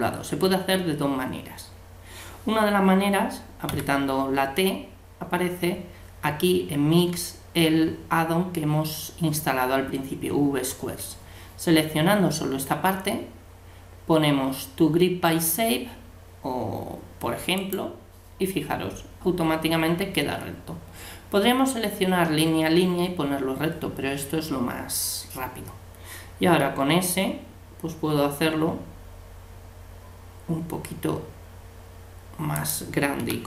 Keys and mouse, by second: 3.7 t, 17.6-19.4 drag, 26.7 s, 33.2 g.